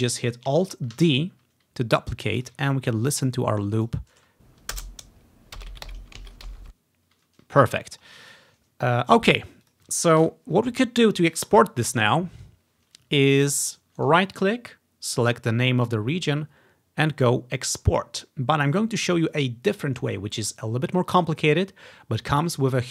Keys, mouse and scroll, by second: 1.1 alt+d, 2.5 ctrl+click, 2.8-3.6 ctrl+scroll up 1, 3.9 click, 4.3 space, 5.1 click, 6.1-6.6 ctrl+scroll down 1, 6.6 space, 7.8-8.1 ctrl+scroll down 2, 8.4 click, 9.7 click, 10.3 Delete, 10.3 click, 12.0 click, 13.5 click, 14.1 right click, 19.4-21.7 drag.